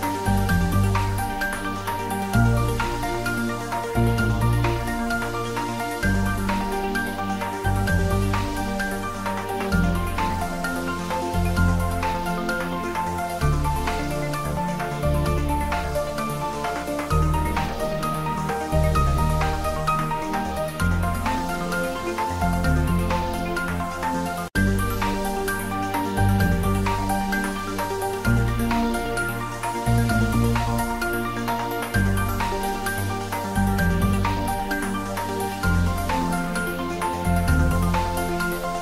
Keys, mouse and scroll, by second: 0.3 s, 1.8 click, 2.1-5.9 typing, 2.7 click, 4.6 click, 7.1-9.2 typing, 7.1 click, 7.9 click, 9.9 click, 10.2 ctrl+middle click, 10.6-11.5 typing, 11.9 click, 12.2-13.5 middle drag, 13.2-14.2 typing, 14.2-16.5 drag, 17.7 shift+z, 19.2 click, 20.9 shift+click, 22.3 r, 23.3 Up, 27.7 click, 28.7-31.6 typing, 30.4 click, 32.6 click, 32.9 middle click, 33.6 shift+z, 33.8 middle click, 34.3 ctrl+middle click, 34.5 shift+middle click, 34.7-35.6 typing, 35.5 click, 35.7 Tab, 36.1 ctrl+r, 37.5 click, 37.7 d, 38.2 click, 38.5 ctrl+z.